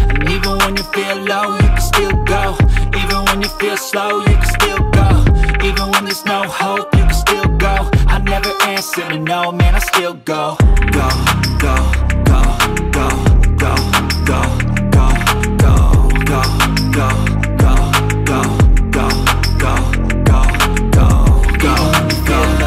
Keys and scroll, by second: 4.2 ctrl+alt+shift+e.